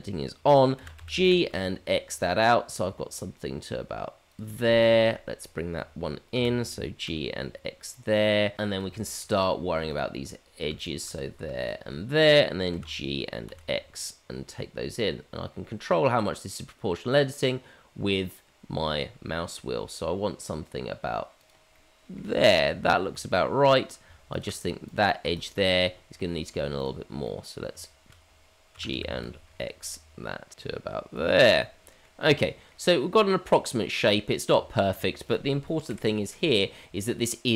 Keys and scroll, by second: 0.7 g, 6.3 g, 12.7 g, 28.6 g, 30.6 g, 34.5 Tab, 35.9 KP_Divide.